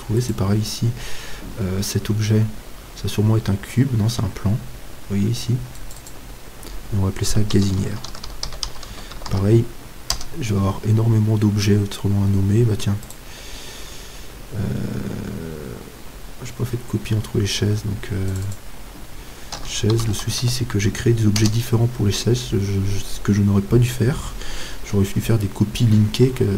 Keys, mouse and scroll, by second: 0.8-5.8 right drag, 5.8-8.0 drag, 12.1-13.3 middle drag, 13.3-15.0 right drag, 15.0-18.5 middle drag, 18.5-20.6 drag.